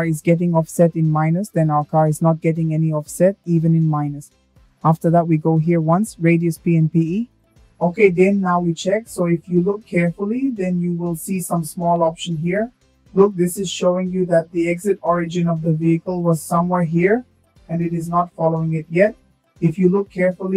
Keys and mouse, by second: 3.4 click, 6.0-7.2 drag, 11.1 click, 19.8-20.5 drag.